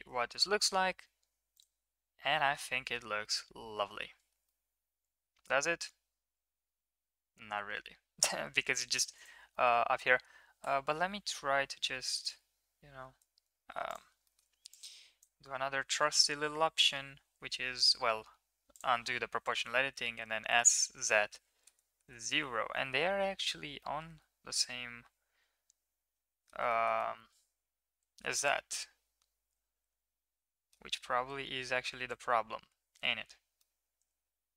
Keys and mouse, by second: 0.1 shift+middle drag, 1.5 click, 2.3 shift+middle drag, 2.8 middle click, 3.2-4.0 middle drag, 4.4-8.3 middle drag, 9.1 click, 9.5 middle click, 10.6 Tab, 12.2 KP_3, 13.8 click, 14.2 shift+middle click, 14.9 drag, 16.0 s, 18.7 click, 20.0 s, 22.9 Escape, 23.8-26.4 middle drag, 26.7 shift+middle click, 27.0-30.7 middle drag, 31.3 KP_1, 33.6-34.5 middle drag.